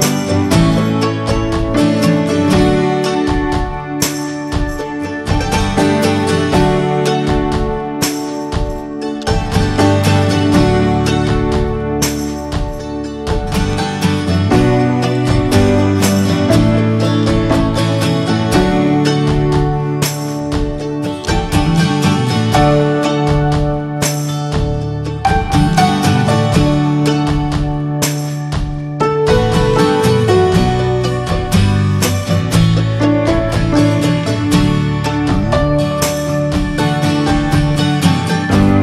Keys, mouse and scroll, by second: 0.0 right click, 0.1 drag, 1.1 /, 1.5 scroll up 2, 1.8-2.7 middle drag, 2.7 scroll up 1, 2.8 Tab, 3.2 shift+middle click, 3.4-4.2 scroll up 2, 3.7 middle click, 4.2 shift+middle click, 4.9 ctrl+r, 6.7 ctrl+r, 9.4 ctrl+r, 10.4 middle click, 10.7 scroll up 2, 10.9 shift+middle click, 11.6 ctrl+r, 14.6 ctrl+r, 16.0 middle click, 16.3 scroll down 1, 16.6 shift+middle click, 17.0-17.4 scroll up 1, 17.4-18.9 shift+middle drag, 18.9-19.4 scroll up 1, 19.4 ctrl+r, 21.0 ctrl+b, 24.2 ctrl+r, 25.3 scroll down 4, 25.7-27.4 shift+middle drag, 27.4-28.3 scroll up 3, 27.8 middle click, 28.3 shift+middle click, 29.1 ctrl+r, 30.5 shift+middle click, 31.5 ctrl+r, 32.2 ctrl+b, 37.0 scroll down 1, 37.3 middle click, 38.0 scroll up 2, 38.4 shift+middle click.